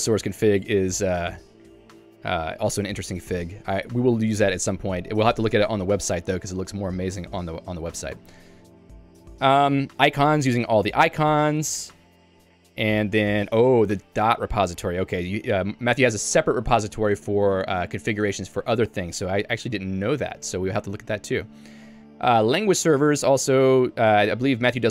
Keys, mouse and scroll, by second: 1.7 j, 11.5 k, 12.1 j, 13.1 k, 13.8 j, 24.1-24.9 typing.